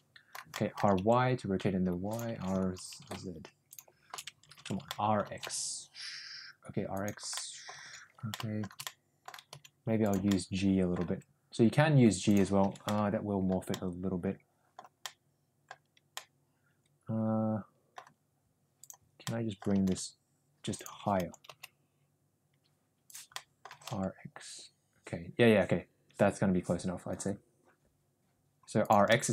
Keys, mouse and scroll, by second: 0.5-2.1 middle drag, 0.7 r, 2.6 ctrl+z, 2.6 r, 4.8 ctrl+z, 4.8 middle click, 5.3 r, 7.3 middle click, 8.1 ctrl+z, 8.2 shift+middle click, 8.8 middle click, 9.4 g, 10.3-10.9 middle drag, 11.0 g, 12.9 ctrl+z, 12.9-13.4 middle drag, 13.6-14.7 middle drag, 15.0-15.6 middle drag, 16.0-17.9 middle drag, 19.2-19.5 middle drag, 19.7 r, 21.1 ctrl+z, 21.2 r, 23.3 middle click, 23.6 r, 29.0-29.3 middle drag.